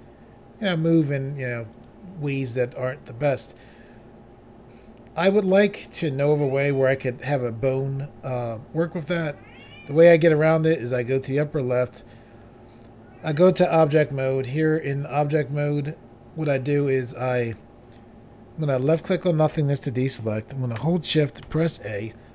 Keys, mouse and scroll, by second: 1.7 right click, 3.5 click, 11.2 click, 13.4 click, 18.9 click, 19.1 click, 21.5 a.